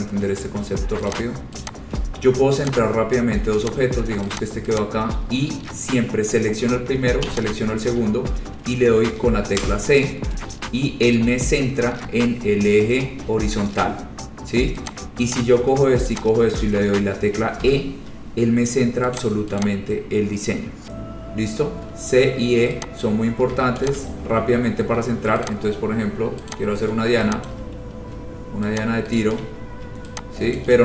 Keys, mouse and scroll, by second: 0.1 click, 0.3 shift+click, 1.3 click, 1.8 click, 2.1-2.5 scroll, 2.8 click, 3.3-3.6 scroll, 3.9 click, 4.5 click, 4.9 click, 7.5 shift+click, 9.7 c, 15.1 click, 15.5 click, 16.3 shift+click, 16.5 shift+click, 17.8 e, 19.3 click, 19.8 click, 23.2 click, 24.0 shift+click, 24.1 shift+click, 25.7 click, 25.9-26.4 scroll, 26.7 click, 26.9-27.2 scroll, 27.6 click, 28.7 scroll down 2, 29.3 shift+click, 29.3 shift+right click, 30.7 shift+click, 30.7 shift+right click.